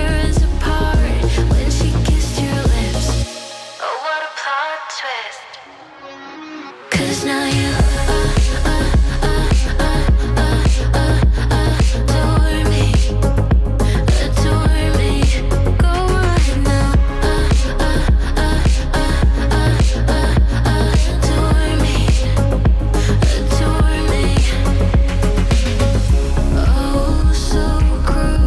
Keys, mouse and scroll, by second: 2.8-4.5 typing, 5.7-8.4 typing, 6.1 click, 10.2-11.2 typing, 10.3 click, 11.6 Return, 12.6-13.0 scroll down 1, 13.1-14.6 middle drag, 13.1 typing, 14.6-17.5 drag, 21.0-25.2 drag, 27.2 *, 27.7 5, 28.0 Return.